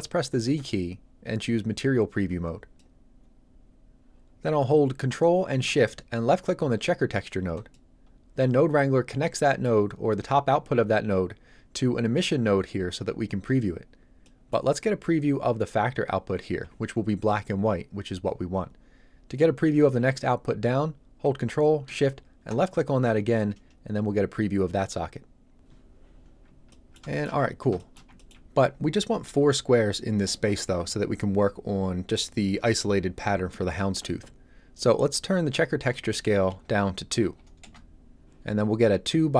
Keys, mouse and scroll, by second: 0.5 z, 1.4 click, 7.5 ctrl+shift+click, 9.3 shift+middle click, 14.2 middle click, 22.5 ctrl+shift+click, 26.7 ctrl+middle click, 27.0 shift+middle click, 27.1 shift+middle click, 27.4 ctrl+middle click, 27.8 shift+middle click, 28.1 ctrl+middle click, 28.2 ctrl+middle click, 35.8 click, 37.2 KP_2, 37.6 Return.